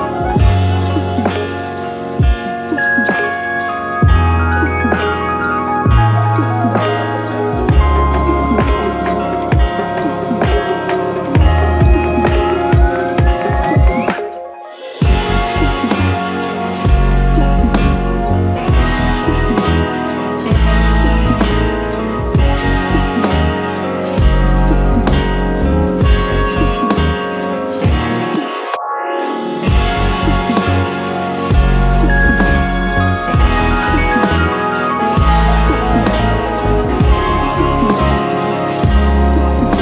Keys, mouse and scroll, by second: 3.4-10.4 right drag, 10.4-15.4 middle drag, 12.4-12.9 scroll up 2, 15.4 click, 18.4 l, 21.4-24.9 middle drag, 24.9 click, 30.2 alt+shift+click, 36.5-38.0 middle drag, 38.0 alt+shift+click, 39.2 middle click.